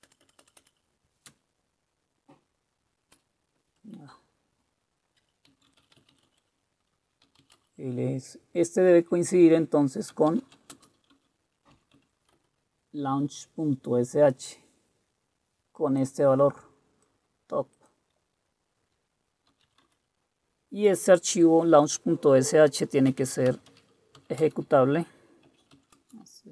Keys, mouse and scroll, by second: 0.0 Return, 0.2 Return, 0.4 Return, 0.6 Return, 0.8 Return, 1.4-3.1 space, 5.4-7.9 typing, 9.2-11.8 typing, 12.0 Tab, 12.4 Return, 19.5-20.2 typing, 23.1-26.5 typing.